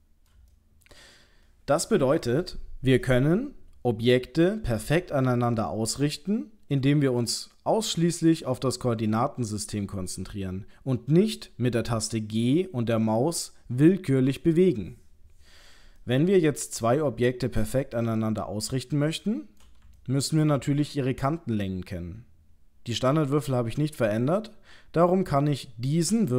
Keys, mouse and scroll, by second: 0.5 shift+middle click, 16.0 middle click, 18.0 middle click, 19.3 shift+middle click, 20.0 ctrl+middle click, 24.0 click.